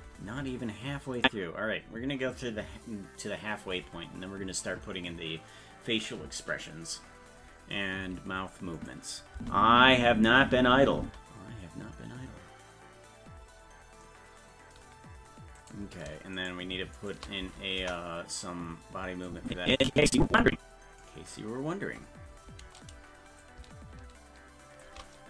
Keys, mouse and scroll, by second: 1.2 click, 8.8 click, 9.3 space, 13.4-13.8 scroll down 4, 15.6 right click, 16.4 shift+right click, 17.8 KP_0, 19.3-21.0 drag, 23.4-24.9 shift+drag.